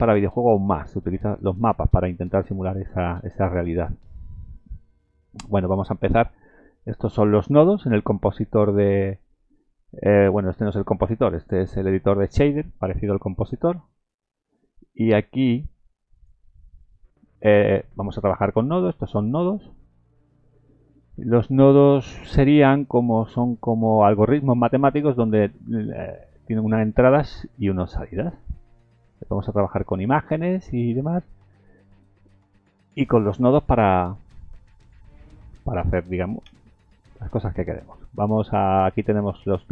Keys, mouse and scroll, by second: 7.5-8.1 scroll up 3, 13.5 shift+middle click, 14.4 scroll up 1, 17.5-18.0 scroll up 1, 18.0-18.8 scroll down 4, 19.3 click, 19.8-20.6 scroll up 7, 21.1-22.1 scroll down 8, 24.2-24.7 scroll up 4, 33.0 shift+click, 34.2 scroll down 3, 34.7 shift+middle click, 36.4 shift+a.